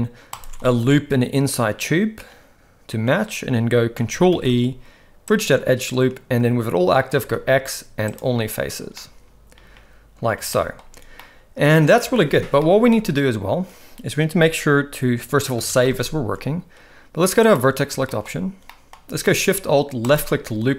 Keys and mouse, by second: 0.3 alt+shift+click, 0.6-3.1 middle drag, 4.3 ctrl+e, 7.2 x, 9.0-10.3 middle drag, 10.5 shift+middle drag, 11.2-11.9 middle drag, 12.6-12.9 middle drag, 15.6 ctrl+s, 15.8 ctrl+s, 15.9 ctrl+s, 18.1 shift+middle click, 18.7 middle click, 20.1 alt+shift+click.